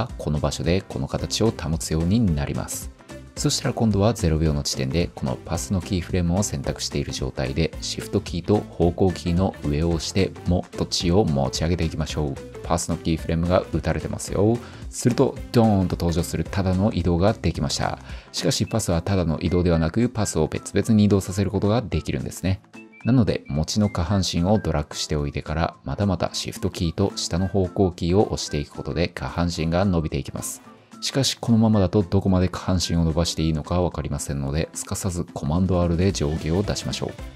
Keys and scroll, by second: 5.7 shift+1, 24.6 shift+Down.